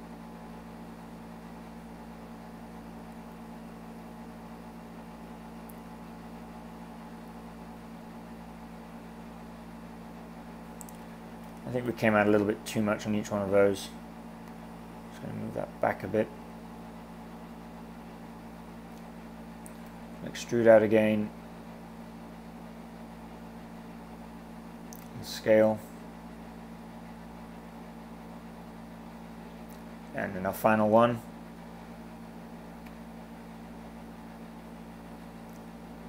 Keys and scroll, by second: 11.1 super+z, 19.8 e, 25.1 s, 30.9 e, 33.0 s.